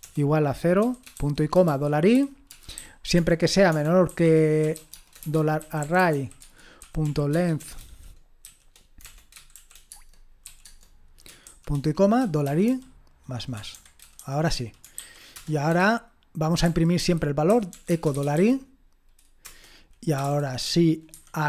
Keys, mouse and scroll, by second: 0.0-18.4 typing, 6.4 Tab, 19.4-21.4 typing.